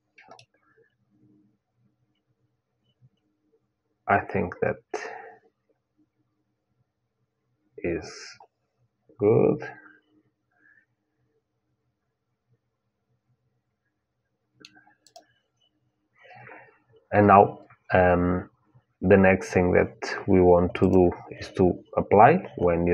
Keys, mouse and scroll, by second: 1.5 middle click, 14.8-16.8 drag, 20.5-22.7 drag.